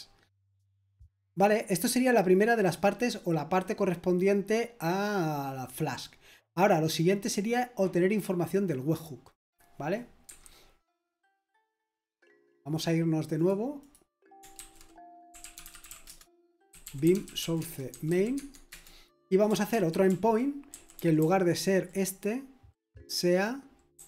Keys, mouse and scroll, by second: 0.4-1.5 scroll down 1, 1.5-3.0 scroll down 1, 3.0-4.8 scroll down 1, 4.8-6.2 scroll down 1, 6.2-8.7 scroll down 1, 8.7-12.9 scroll down 1, 12.9-15.4 scroll down 1, 15.1-18.4 typing, 18.7 Return, 19.7 ctrl+d, 20.1 ctrl+d, 20.4-21.8 typing.